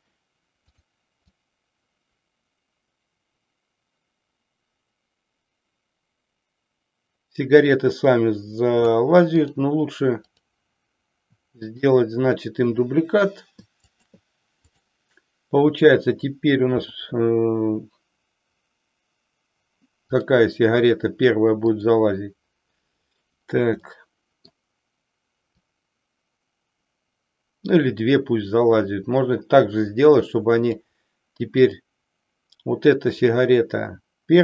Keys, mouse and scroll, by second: 0.7 click, 1.3-8.9 drag, 11.7 shift+click, 13.8 shift+click, 14.5 click, 20.1 click, 21.7 click, 23.8-24.6 middle drag, 25.7-30.8 drag, 31.6 click.